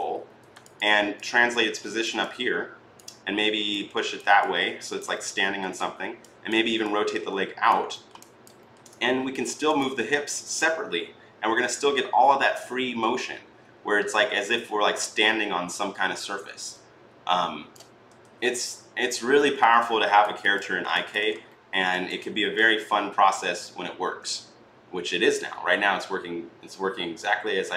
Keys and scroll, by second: 0.0 e, 18.0 ctrl+z.